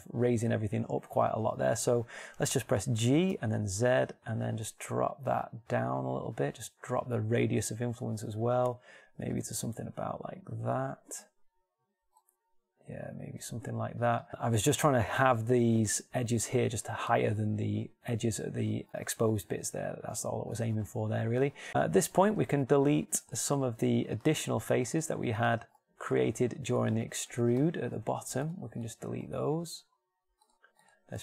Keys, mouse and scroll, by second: 3.7 g, 24.1 ctrl+Tab.